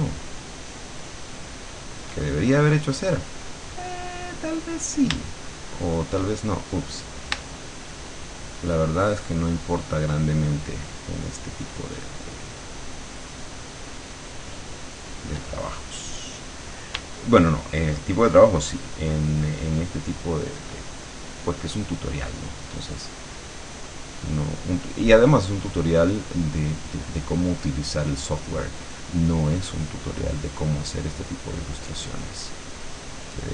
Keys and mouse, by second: 5.4 shift+click, 5.6 shift+middle click, 6.2 shift+click, 7.5 shift+click, 7.8 shift+middle click, 8.4-14.0 shift+drag, 14.0 shift+middle click, 14.9 shift+click, 15.7 shift+middle click, 15.9 shift+click, 16.0 middle click, 16.1 click, 16.4 middle click, 18.2-20.8 shift+drag, 21.4 middle click, 21.8-25.2 drag, 25.2 middle click, 30.2-32.2 drag, 33.3-33.5 drag.